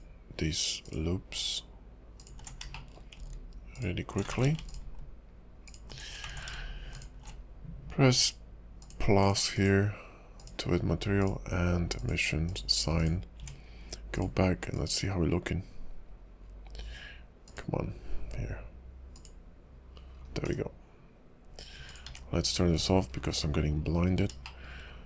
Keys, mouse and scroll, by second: 0.8 alt+shift+click, 2.1 alt+shift+click, 2.7 shift+middle click, 3.7 alt+shift+click, 4.3 ctrl+z, 4.6 alt+shift+click, 5.6 alt+shift+click, 6.3 ctrl+z, 6.9 alt+shift+click, 9.2 click, 9.5 click, 10.4 click, 11.2 click, 12.5 click, 12.9 click, 13.4 Tab, 15.6 click, 15.8 click, 19.4 click, 20.1-20.6 scroll down 7, 20.6 /, 21.8 click, 22.0 x, 23.3-24.3 scroll up 9, 24.6 shift+middle click.